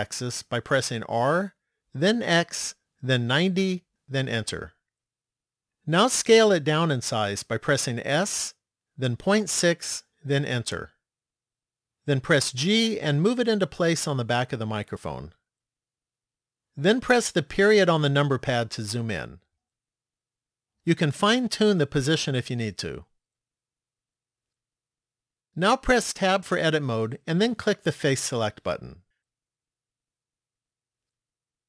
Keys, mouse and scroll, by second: 0.6 r, 7.8 s, 12.7 g, 18.0 KP_Decimal, 21.9 click, 26.2 Tab, 29.2 click, 31.1 middle click.